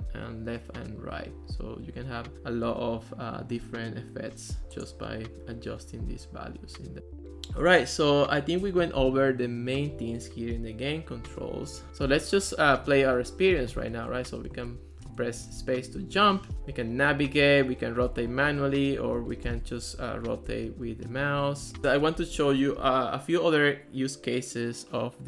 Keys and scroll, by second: 7.3 Return, 12.0-16.7 typing, 16.5 Right, 17.1 Left, 18.1 w, 19.3-22.9 typing.